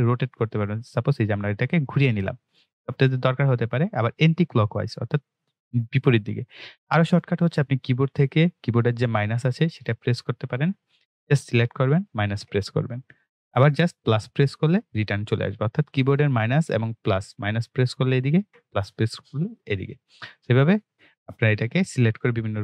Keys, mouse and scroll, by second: 0.7 click, 4.5 click, 8.5 click, 11.4 click, 19.6 click.